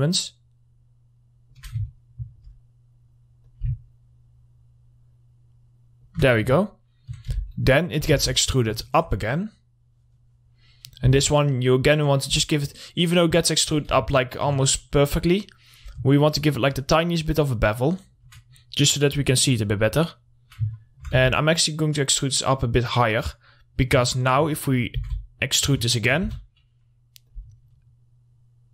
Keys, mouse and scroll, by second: 2.3-3.9 alt+middle drag, 3.9-7.0 drag, 7.0 alt+middle click, 7.8 w, 8.0 middle click, 8.6 shift+e, 8.7 right click, 9.2 alt+middle click, 9.8-11.5 drag, 11.5 r, 12.6-14.5 drag, 14.5 alt+middle click, 16.2-21.2 drag, 21.2 alt+middle click, 21.6 w, 22.4-24.6 drag, 24.6 alt+middle click, 25.4 e, 25.8 right click, 26.4 alt+middle click, 26.7 r, 26.8 scroll down 1, 27.7-28.7 drag.